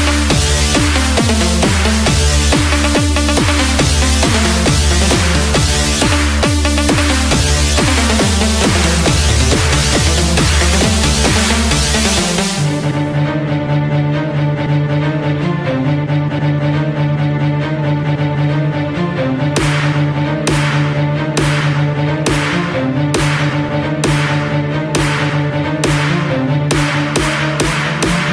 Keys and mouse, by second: 4.5 g, 9.2 click, 11.9 KP_6, 13.9 KP_Add, 15.2 s, 18.5 Tab, 23.2 click, 24.5 f, 25.9 Tab.